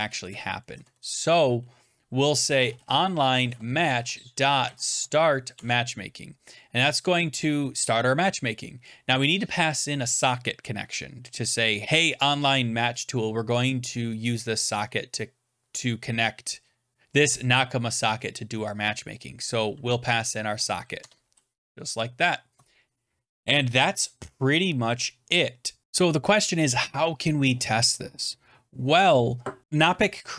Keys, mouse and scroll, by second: 0.7 Up, 0.7 Down, 0.7 Tab, 2.2-5.4 typing, 5.4 Tab, 5.7 Return, 5.7 Up, 5.7 Down, 19.7-21.1 typing, 21.7 Right, 22.5 Return, 23.1 scroll down 3, 23.6-24.2 scroll up 2, 25.8 click.